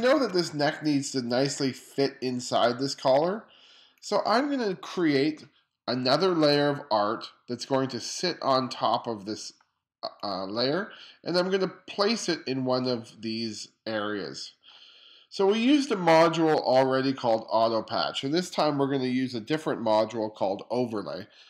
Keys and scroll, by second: 0.0 2.